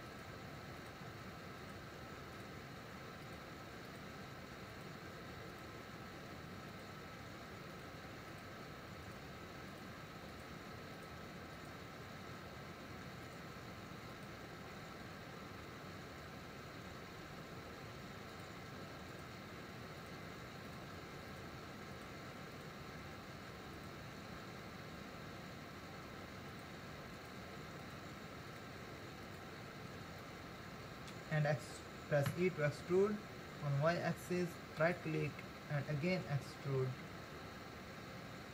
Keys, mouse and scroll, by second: 0.1 shift+click, 0.8 shift+click, 1.6 shift+click, 2.4 shift+click, 3.2 shift+click, 3.9 shift+click, 4.7 shift+click, 5.5 shift+click, 6.7 shift+click, 7.7 shift+click, 8.3 shift+click, 9.1 shift+click, 9.7 shift+click, 11.6 shift+click, 13.3 shift+click, 14.1 shift+click, 18.3 shift+click, 19.1 shift+click, 20.0 shift+click, 20.6 shift+click, 21.3 shift+click, 21.9 shift+click, 22.6 shift+click, 23.8 shift+click, 26.5 shift+click, 27.2 shift+click, 27.8 shift+click, 28.5 shift+click, 30.2-32.8 middle drag, 32.8 e, 37.4 e.